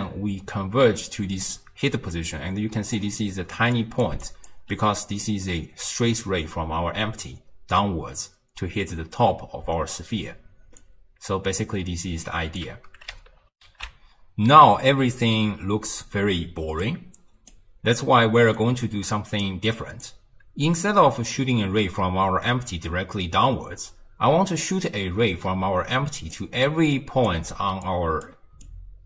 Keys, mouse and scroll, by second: 3.6 d, 3.8-4.1 drag, 4.1 d, 4.3 click, 4.5 d, 7.6 d, 10.8-13.6 drag, 13.6 ctrl+alt+shift+q, 16.9-18.0 drag, 18.0-19.1 middle drag, 19.1 click, 20.1 click, 26.1-29.0 typing, 26.4 click, 27.0 click, 27.9-28.3 drag, 28.7-29.0 drag.